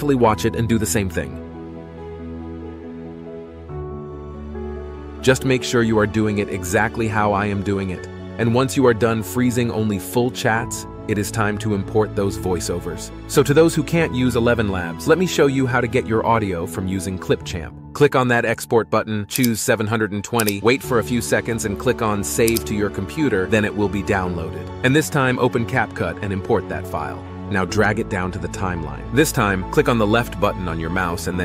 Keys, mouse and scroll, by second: 2.5 ctrl+b, 2.9 ctrl+z, 6.7 ctrl+b, 15.6 typing.